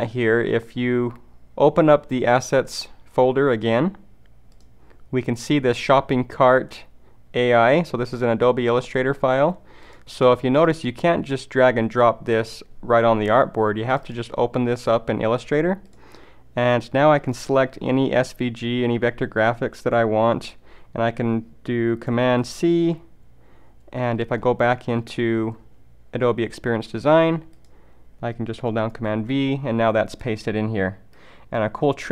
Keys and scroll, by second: 22.5 super+c, 29.0 super+v.